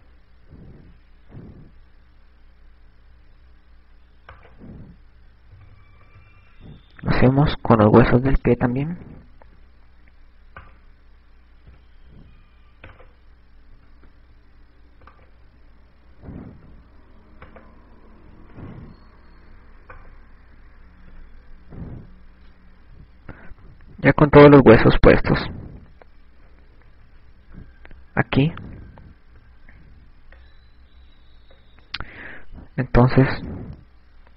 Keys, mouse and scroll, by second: 5.6 right click, 6.8 KP_6, 7.7 KP_Add, 7.7 KP_6, 8.3 KP_Add, 8.3-9.1 shift+scroll down 1, 10.3 i, 11.8 right click, 12.8 i, 13.2 right click, 15.2 i, 16.4 right click, 17.3 i, 19.7 i, 21.5 right click, 21.7 i, 24.6 KP_1, 26.4 shift+scroll up 1, 27.8 KP_Subtract, 33.6-34.1 shift+scroll down 1.